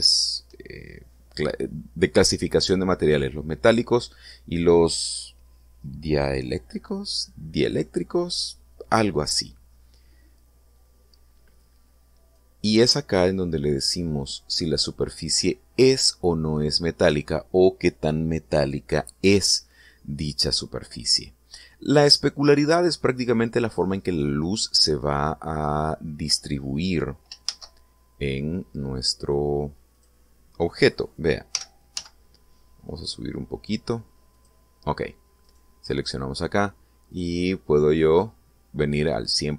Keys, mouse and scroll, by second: 13.2-15.8 drag, 25.4-26.0 scroll down 2, 26.5-27.1 scroll up 2, 27.4 scroll down 2, 28.3 shift+a, 30.8 click, 32.4 g, 32.8 z, 35.2 click, 36.3 right click, 37.9-39.3 drag.